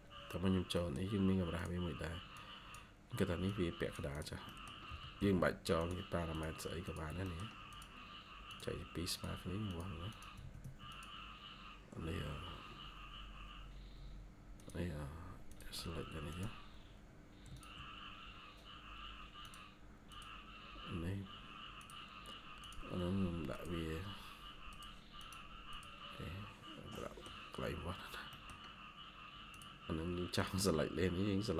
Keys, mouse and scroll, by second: 0.6 middle click, 0.9 scroll up 1, 4.4 middle click, 4.8 typing, 7.1 middle click, 10.0 double click, 10.3 Escape, 10.5 Escape, 12.3 scroll down 1, 15.8 scroll up 1, 17.4 ctrl+click, 25.1 double click, 26.2 scroll down 1, 26.8 middle click, 27.5 scroll up 1, 28.2 middle click, 29.8 scroll up 1.